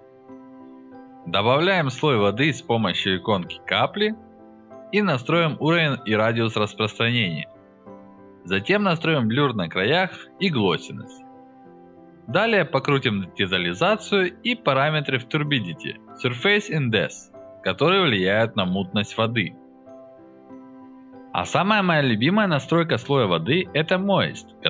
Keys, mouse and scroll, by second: 3.6 alt+middle click, 3.7-5.6 drag, 5.8 alt+middle click, 6.0 alt+click, 6.0 alt+right click, 6.6-8.7 drag, 9.0-10.2 drag, 10.7-12.9 drag, 13.8-16.2 drag, 16.4-17.8 drag, 17.9 click, 18.8 alt+click, 19.4-20.0 drag, 20.2 drag, 20.7 click.